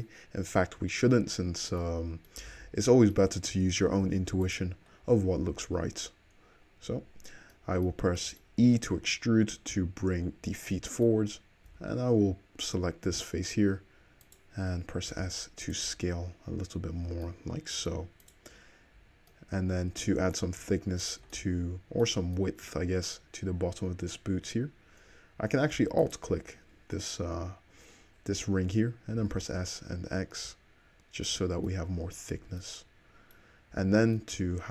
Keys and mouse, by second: 2.6 alt+z, 4.1 3, 4.5 click, 5.3 `, 8.6 e, 9.3-14.3 middle drag, 14.3 click, 14.3 3, 14.4-17.3 middle drag, 15.1 s, 15.9 `, 18.1 middle click, 18.3 click, 18.4-21.1 shift+middle drag, 21.1 shift+click, 21.2-26.1 shift+middle drag, 26.1 alt+click, 26.2-31.0 alt+middle drag, 29.2 s, 32.4 Tab, 33.8 Tab.